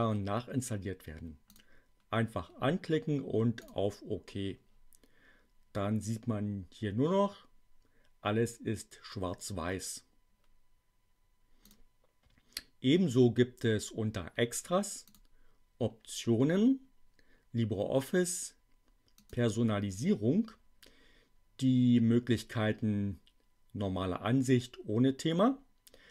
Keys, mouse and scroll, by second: 1.5 click, 3.5 click, 11.5 click, 15.0 click, 19.1 click.